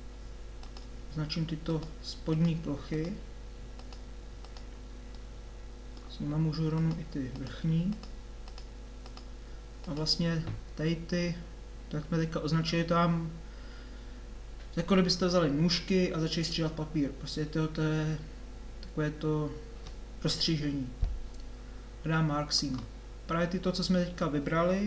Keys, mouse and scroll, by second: 0.6-5.5 middle drag.